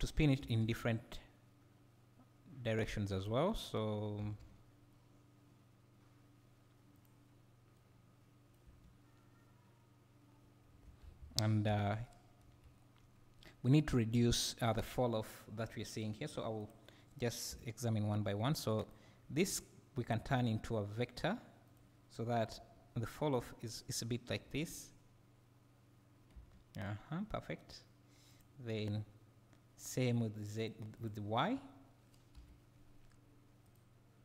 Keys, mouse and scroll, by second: 0.4 g, 3.6 click, 4.2 g, 7.0 click, 7.8-16.0 right drag, 8.7 space, 11.1 Escape, 16.0-16.7 drag, 18.8 click, 19.5 click, 21.0 v, 21.6 click, 22.6 g, 23.8 click, 24.4 space, 26.3 space, 28.3 click, 30.6 click, 30.9 click, 33.6 click.